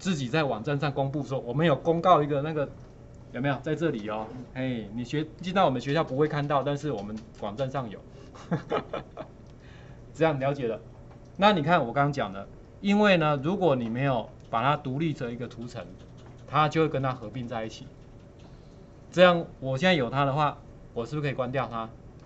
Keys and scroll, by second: 5.4 Return, 15.1 ctrl+4, 20.5 ctrl+4.